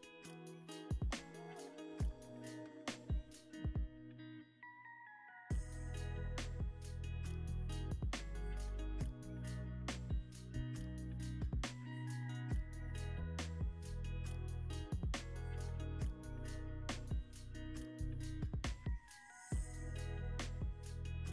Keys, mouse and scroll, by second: 1.0 Tab, 2.1 Tab, 3.0 a, 3.4 e, 4.3 Tab, 5.3 ctrl+z, 6.0 ctrl+z, 6.9 ctrl+z, 7.7 e, 9.4 ctrl+v, 10.0 Return, 10.6 Escape, 12.7 Tab, 14.0 scroll, 14.1-14.5 scroll down 1, 14.6 Tab, 15.2 a, 15.8 e, 17.7 ctrl+c, 17.7 typing, 18.9 Escape, 19.6 ctrl+z, 20.1 Tab, 20.8 Tab.